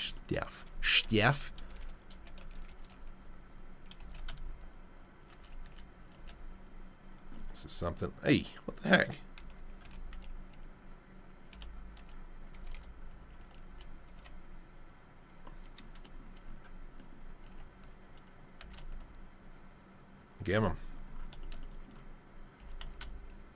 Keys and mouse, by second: 1.2 r, 2.4 r, 4.0 g, 6.2 g, 9.4 alt+r, 13.7 g, 17.5 g, 22.6 g.